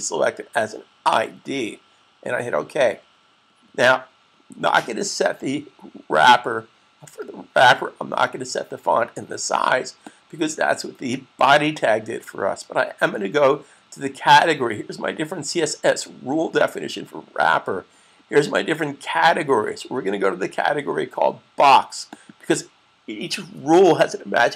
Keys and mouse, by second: 2.5 click, 9.8 click, 22.1 click.